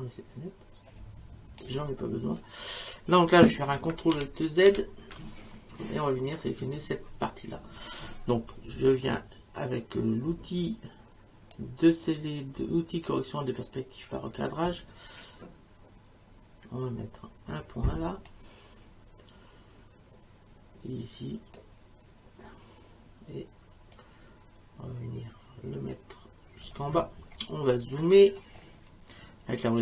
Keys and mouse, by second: 1.6 click, 4.1 ctrl+alt+z, 11.5 click, 18.3 click, 24.0 click.